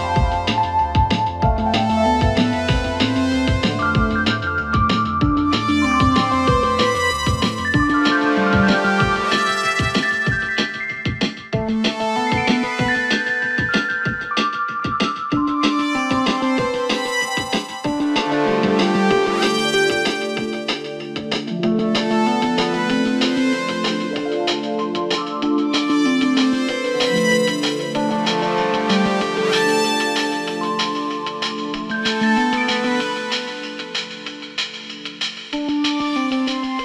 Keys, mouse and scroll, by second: 0.3 e, 2.7 s, 4.5 e, 6.4 s, 9.6 ctrl+KP_Add, 10.1 ctrl+KP_Add, 12.4 3, 12.9 scroll down 2, 13.2-14.3 shift+middle drag, 14.3 shift+d, 17.0 r, 18.4 shift+middle click, 18.9-20.4 scroll up 5, 20.4 s, 21.6 g, 24.2 r, 25.9 click, 26.9 click, 30.3 2, 30.9 click, 31.8 r, 33.8 s, 34.9 click, 35.3 s, 36.6 g.